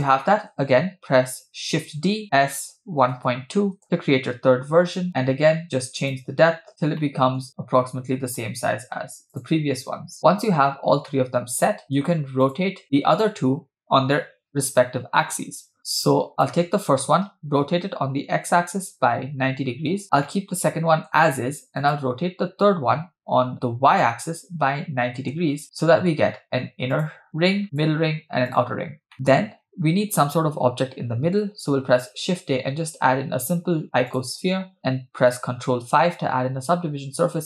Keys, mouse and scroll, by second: 2.0 shift+d, 4.9 KP_7, 5.6-6.7 drag, 6.7-7.0 scroll up 2, 6.7 BackSpace, 7.1-9.1 shift+middle drag, 9.3 click, 10.2 scroll down 5, 11.1-12.2 middle drag, 12.5 click, 13.2 click, 16.3 click, 17.8 r, 20.0 scroll down 2, 20.2-21.1 middle drag, 21.8 click, 23.0 r, 25.6-26.1 middle drag, 26.9 click, 27.7 drag, 28.6-29.1 drag, 29.1 middle click, 31.8 shift+a, 35.9 ctrl+5.